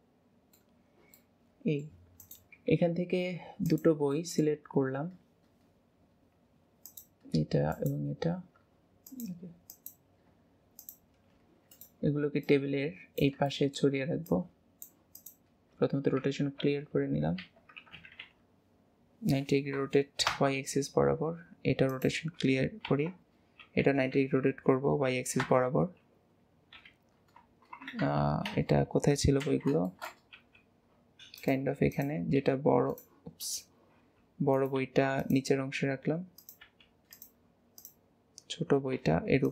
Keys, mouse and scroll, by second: 0.8 middle click, 0.8-1.2 scroll down 2, 1.2 middle click, 1.4-2.2 middle drag, 4.1 middle click, 6.9 click, 7.7 shift+click, 9.0 click, 9.7 click, 10.8 shift+click, 13.5-14.2 shift+middle drag, 14.2 click, 15.1 click, 16.2 alt+r, 21.9 click, 22.8 alt+r, 26.8 KP_7, 29.4 alt+z, 29.8-30.4 shift+middle drag, 30.4 r, 32.0 click, 33.4 click, 37.8 click.